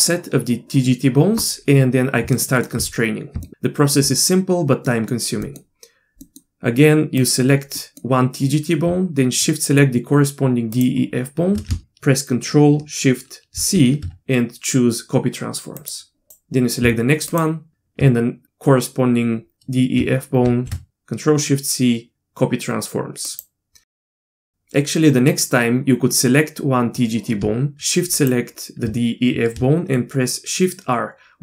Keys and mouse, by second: 2.4 shift+middle drag, 3.4 shift+middle drag, 4.9 middle click, 5.5 middle click, 6.2 middle click, 7.2-7.6 drag, 7.8 middle click, 10.7-11.1 shift+drag, 11.8 ctrl+shift+c, 13.6 ctrl+shift+c, 16.3 click, 17.3 shift+drag, 24.4 click, 28.2 shift+click.